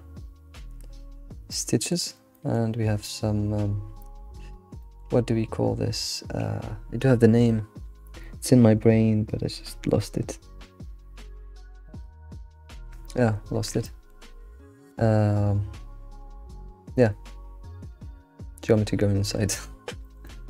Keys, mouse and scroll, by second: 5.2-8.2 scroll up 3, 13.9-16.9 shift+middle drag, 19.2-19.6 scroll down 2, 19.6-20.1 shift+middle drag, 20.3 alt+middle click.